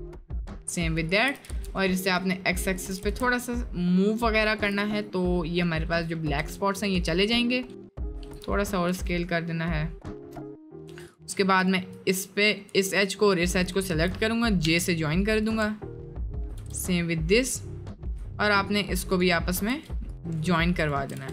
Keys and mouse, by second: 0.0 alt+shift+click, 0.3 alt+shift+click, 1.4 s, 3.0 s, 4.9 middle click, 5.7 middle click, 6.4 1, 7.0 middle click, 8.1 s, 10.9 1, 11.1 click, 13.1 shift+click, 13.6 shift+click, 14.7 j, 16.6 j, 19.0 shift+click, 19.7 j, 20.1 click, 21.2 j.